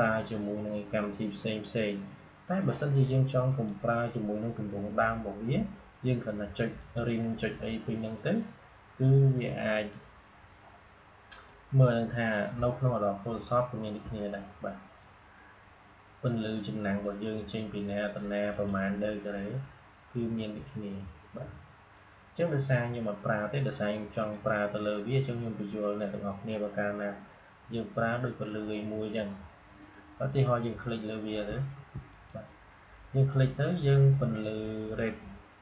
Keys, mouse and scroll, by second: 2.4 click, 5.8 click, 9.6 click, 12.9-18.4 shift+drag, 21.8-24.1 drag, 30.2 click, 32.0 click.